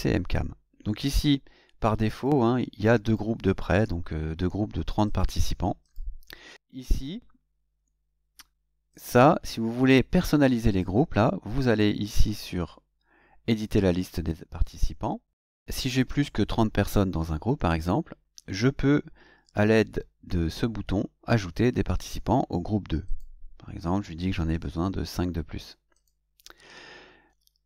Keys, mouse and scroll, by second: 2.1 click, 3.0 click, 5.0 click, 5.8 click, 8.9 click, 10.7 click, 14.0 click, 23.0 click, 24.5 KP_5, 25.9 click.